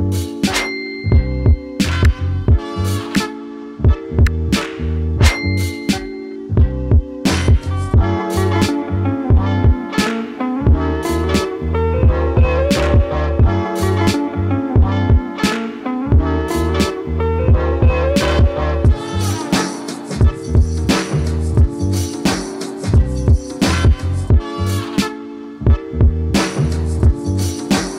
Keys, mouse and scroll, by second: 7.5-15.8 drag, 20.2-20.7 scroll up 1, 20.7-22.3 scroll down 1, 22.3 t, 23.3 click, 24.5 3.